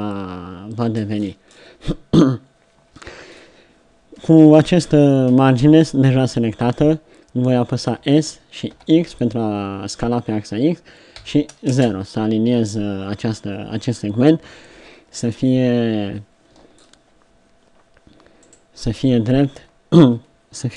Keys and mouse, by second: 8.0 s, 14.8 KP_3.